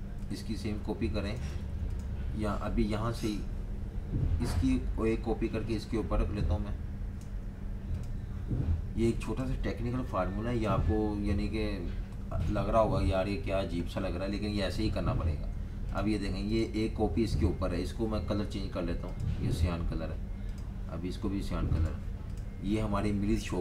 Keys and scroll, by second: 1.6 super+z.